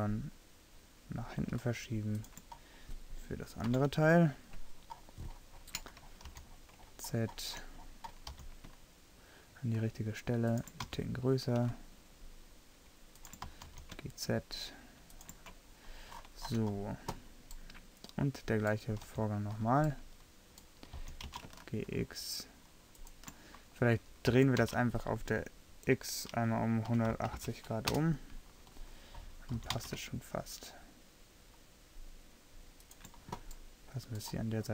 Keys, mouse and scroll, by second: 3.8 KP_3, 6.4 z, 7.9 middle click, 8.4 g, 11.0 s, 13.5 s, 19.1 z, 21.0 g, 24.5 r, 29.2 middle click, 29.7 g, 33.6-34.7 middle drag.